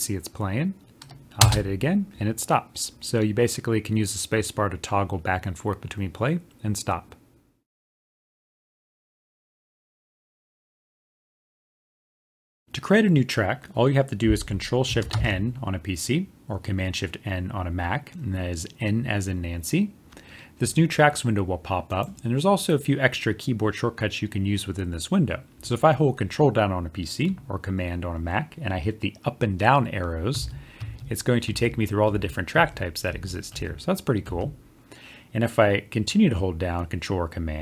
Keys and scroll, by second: 12.9 ctrl+shift+n.